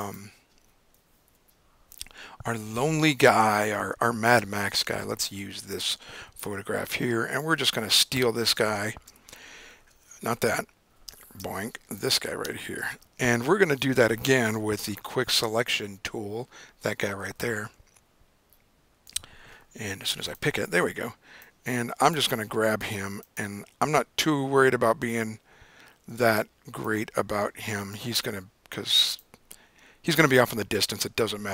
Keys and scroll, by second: 1.2 Up, 1.3 Up, 3.1 Return, 9.5 super+=, 10.4 super+z, 11.4 super+-, 12.9 super+=.